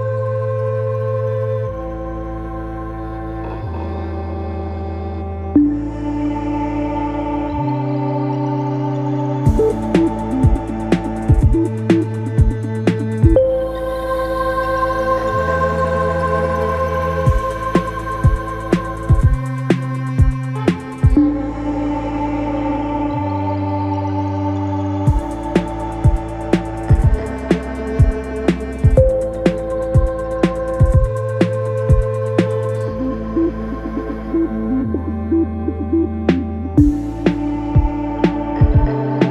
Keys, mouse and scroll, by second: 1.3 drag, 1.6 scroll down 2, 2.7 scroll down 1, 3.5-6.6 drag, 8.2-11.2 drag, 12.0-12.4 scroll up 1, 12.4 Tab, 13.1 click, 14.2 click, 15.3 alt+s, 19.2 Tab, 19.8 Tab, 20.2 click, 21.2 click, 22.0 g, 24.8 Tab, 25.4-27.6 right drag, 27.6 Tab, 28.6 2, 29.3 click, 29.7 click, 31.1 f, 32.0 3, 33.5-38.3 drag, 39.1 click.